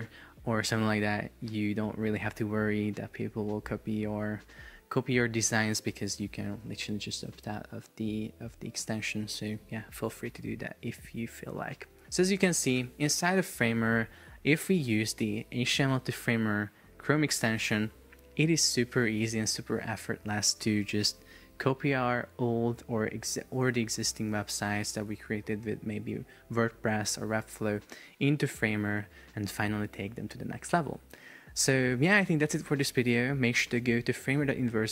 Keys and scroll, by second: 12.9 Escape.